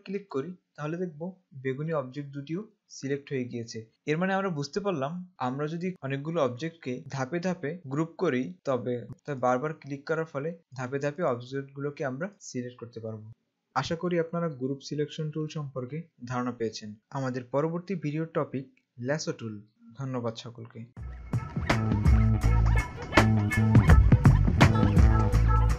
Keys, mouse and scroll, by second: 0.6 click, 9.1 click.